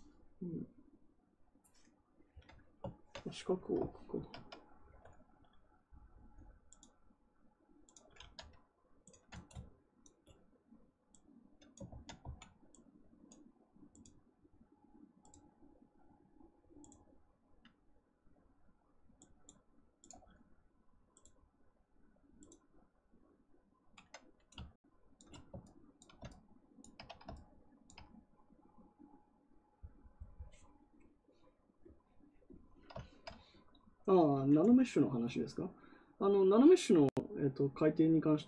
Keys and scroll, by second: 11.8 ctrl+z, 12.1 x.